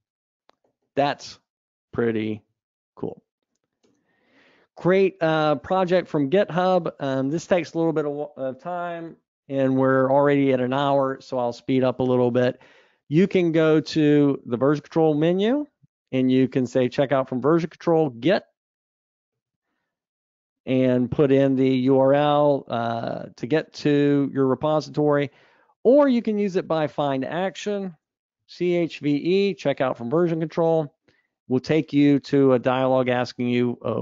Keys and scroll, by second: 0.9 Escape, 2.9 super+Up, 30.1 ctrl+shift+super+a.